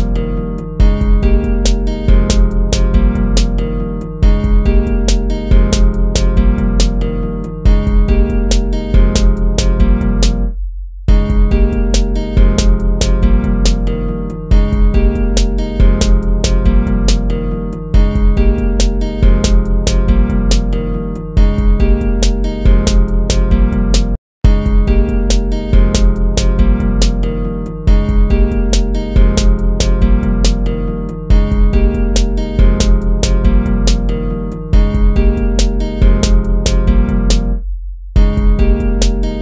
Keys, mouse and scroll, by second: 1.3 ctrl+-, 9.3 ctrl+-, 10.3 ctrl++, 10.7 ctrl++, 16.0 ctrl+z, 20.1 ctrl+-, 20.8 ctrl++, 23.8 ctrl+-, 24.5 ctrl++, 25.2 ctrl++, 26.8 ctrl+z, 29.5 ctrl+-, 29.9 ctrl++, 30.7 ctrl+z, 32.1 ctrl+z, 35.3 ctrl+z, 36.5 ctrl+-, 36.8 ctrl++, 38.0 ctrl++.